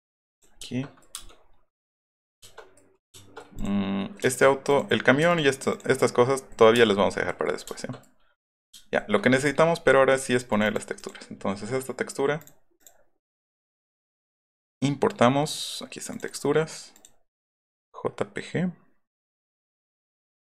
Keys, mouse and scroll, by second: 0.3 click, 0.7 shift+middle click, 1.1 space, 1.3 middle click, 1.8 middle click, 2.4 shift+middle click, 3.0 shift+middle click, 3.5 click, 4.4 middle click, 4.7 click, 5.2 m, 5.3 click, 5.7 click, 6.6 middle click, 6.7 space, 7.4 middle click, 10.5 click, 10.7 click, 10.9 click, 12.3 click, 12.8 click, 13.6 click, 16.1 click, 16.2 click, 19.5 click.